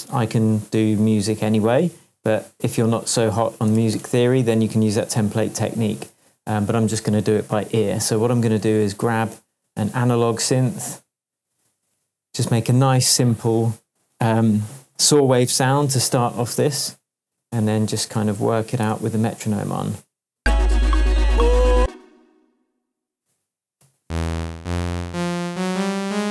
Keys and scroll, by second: 1.8 super+r, 3.7 BackSpace, 3.7 e, 3.9 Return, 6.0 super+s, 18.9 super+l, 20.3 space, 21.4 space, 21.7 space, 23.8 p, 24.5 Up, 25.6 Up.